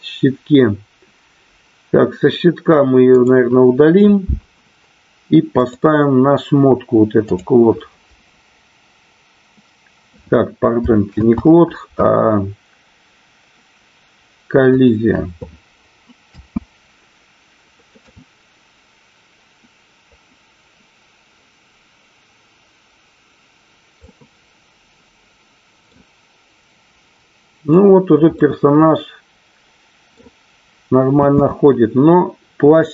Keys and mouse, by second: 3.3 click, 5.6 click, 7.2-7.9 drag, 13.3 ctrl+z, 14.7 click, 16.3 space, 24.7-27.4 middle drag, 28.8-31.0 middle drag, 31.9 space.